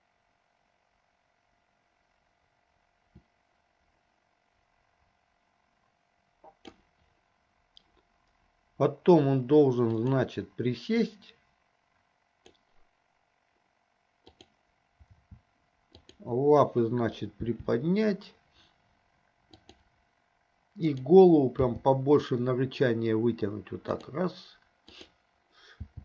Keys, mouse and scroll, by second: 10.0 click, 11.2-13.0 drag, 16.1 shift+click, 17.5 g, 21.1 click, 21.9 g.